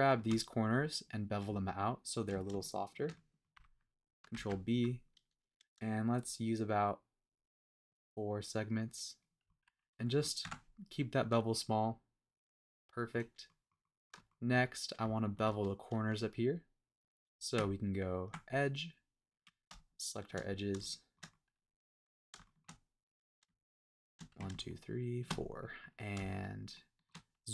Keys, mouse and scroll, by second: 0.8 middle click, 2.1 shift+click, 2.5 shift+middle click, 3.2 middle click, 4.3 super+b, 7.9 scroll down 1, 8.1-9.2 scroll up 1, 9.2 click, 9.4 middle click, 10.4 Tab, 11.0 scroll down 2, 11.2-13.2 middle drag, 13.4 middle click, 13.8-14.2 middle drag, 14.2 shift+middle drag, 14.6-15.0 scroll up 2, 15.1 shift+middle drag, 17.5 Tab, 19.3 click, 20.2 shift+click, 20.5 scroll down 1, 20.7 scroll up 1, 20.8 shift+middle click, 21.2 scroll down 1, 21.3 middle click, 22.4 shift+middle click, 23.0-23.4 scroll up 1, 24.0 shift+click, 25.2 shift+click, 25.5 middle click, 26.3 shift+middle click, 27.4 scroll down 1.